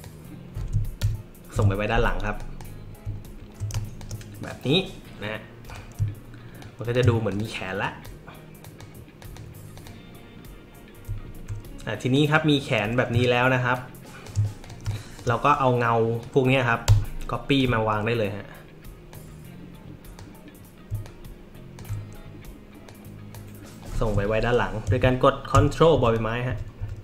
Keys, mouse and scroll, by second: 1.0 ctrl+[, 2.4 drag, 3.4 alt+scroll up 1, 3.7 space, 3.7 click, 4.4 click, 5.6 click, 6.6 shift+click, 7.2 click, 7.8 click, 8.6 click, 9.2 click, 9.7 click, 12.1 click, 13.7 shift+click, 14.6 click, 14.8 space, 14.9 click, 16.2-17.6 drag, 19.1-20.1 drag, 21.0 alt+click, 22.8-23.3 drag, 25.9 ctrl+[, 26.5 ctrl+[, 26.8 ctrl+[.